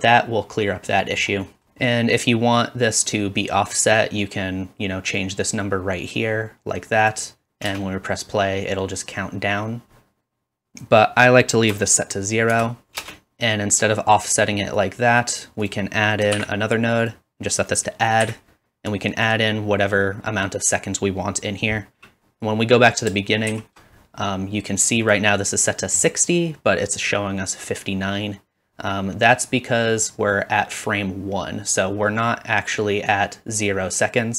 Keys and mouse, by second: 7.7 space, 13.0 space, 16.3 shift+d, 17.9 typing, 23.5 shift+Left.